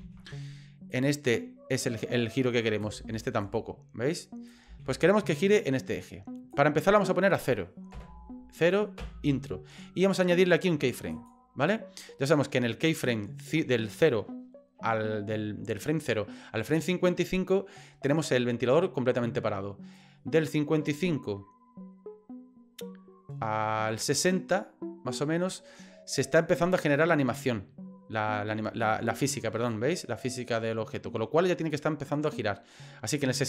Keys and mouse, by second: 0.0 ctrl+z, 0.9-2.8 drag, 3.0 ctrl+z, 3.4-4.5 drag, 4.7 ctrl+z, 5.6 click, 7.0-9.7 drag, 11.2 click, 20.0-26.3 drag, 29.7-32.3 drag.